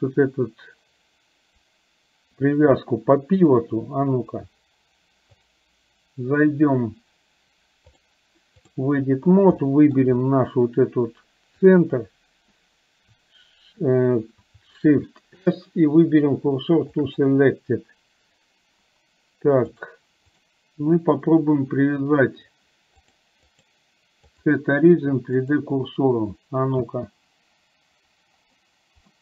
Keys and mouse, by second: 5.4 click, 7.9-8.9 drag, 9.6 shift+middle click, 11.8 click, 15.1 shift+s, 19.8 click, 23.1 click, 23.5-25.8 drag, 27.0 space.